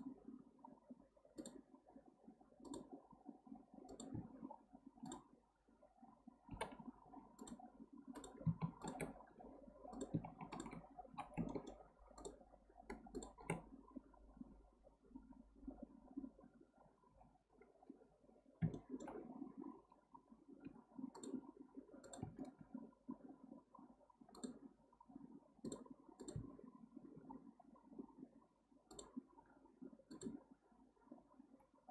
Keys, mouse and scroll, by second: 5.0 click, 6.5 g, 8.1 click, 8.8 shift+click, 9.3 j, 9.9 click, 10.5 shift+click, 11.1 j, 11.5-12.2 shift+middle drag, 12.2 shift+drag, 13.1 shift+click, 18.7-20.6 shift+middle drag, 20.6 k, 22.6 k.